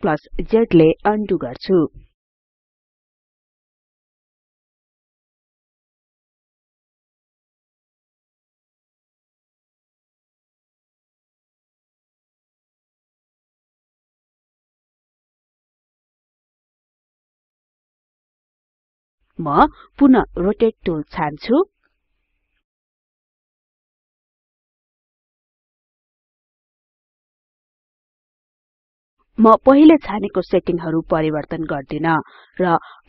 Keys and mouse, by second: 1.3 right click, 30.8 click.